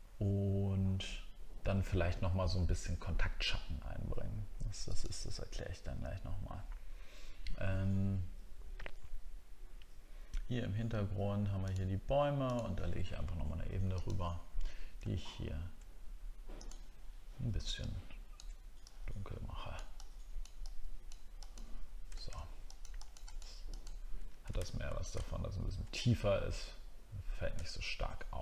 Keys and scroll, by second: 24.6-25.1 alt+scroll down 1, 25.2 alt+scroll up 1, 27.6 alt+scroll down 1.